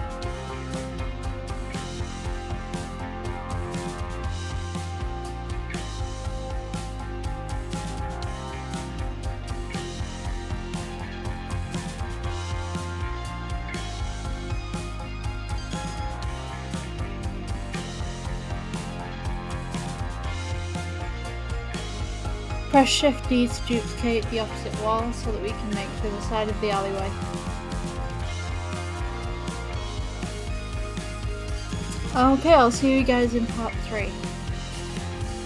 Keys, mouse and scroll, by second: 21.3 click, 23.0 shift+d, 23.2 middle click, 23.7 middle click, 25.7 middle click.